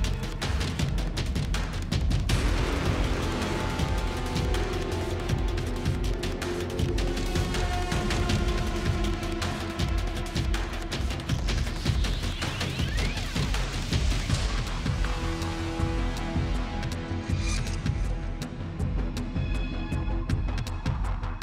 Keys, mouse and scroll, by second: 0.9 Tab, 1.0-1.7 typing, 5.2 Tab, 6.4 typing, 8.0 Tab, 9.1 Tab, 9.4 Tab, 9.4 typing, 9.7 Tab, 10.6-12.0 typing, 12.7 Tab, 13.1-14.2 typing, 15.4 typing, 17.4-19.8 typing, 20.8-21.4 typing.